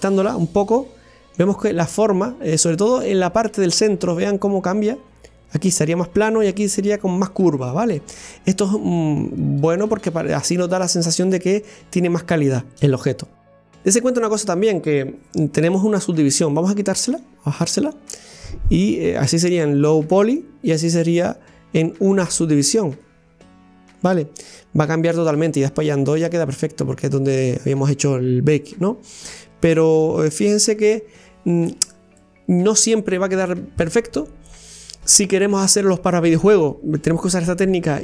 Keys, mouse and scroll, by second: 0.0 scroll down 1, 0.4-1.4 middle drag, 1.4-4.0 scroll up 1, 4.0-4.8 scroll up 1, 4.8-7.6 drag, 7.6-10.7 middle drag, 17.2 click, 17.8 scroll down 1, 18.1-23.1 middle drag, 23.1 click, 23.7-24.1 scroll up 1, 24.1-26.4 middle drag, 26.4 click, 27.8-30.8 middle drag, 30.8 click, 31.7 scroll down 1, 32.2 middle click, 32.8-33.9 scroll up 1.